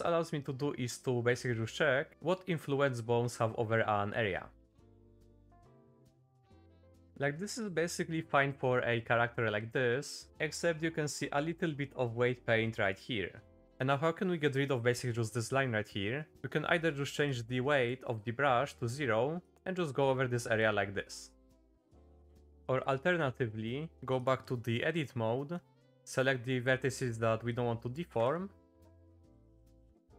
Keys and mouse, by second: 2.1 Down, 3.2 Down, 3.6 Down, 4.1 Down, 4.6 Down, 5.0 Down, 5.3 Down, 5.6 Down, 5.9 Down, 6.3 Down, 6.6 Up, 6.7 Up, 6.9 Up, 7.0 Up, 7.0 Down, 7.0 middle click, 7.8 middle click, 8.4 middle click, 9.1 middle click, 9.8 middle click, 10.4 middle click, 11.1 shift+middle click, 11.4 middle click, 12.8 middle click, 13.6 middle click, 17.3 click, 19.4 click, 20.3 middle click, 20.7 click, 21.5 middle click, 21.8 click, 22.6 Down, 22.6 Up, 22.6 middle click, 23.6 shift+middle click, 24.3 click, 25.9 c, 28.3 middle click, 28.8 c.